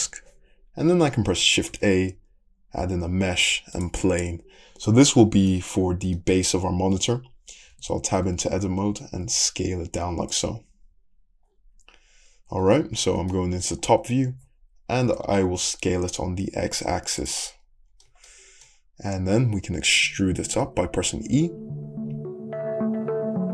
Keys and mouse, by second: 1.7 shift+middle click, 1.7 shift+a, 3.9-19.4 middle drag, 7.8 Tab, 8.2 s, 10.7 `, 14.3 s, 20.2 e.